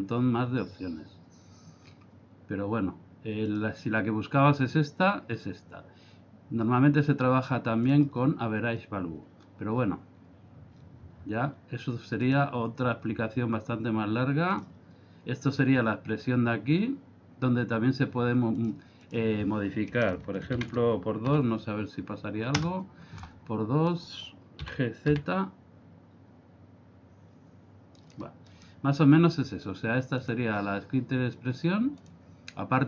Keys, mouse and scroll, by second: 1.9-2.6 scroll up 4, 3.4 click, 12.3 click, 18.6 click, 24.0 right click, 24.7 g, 28.6 right click, 30.2 click.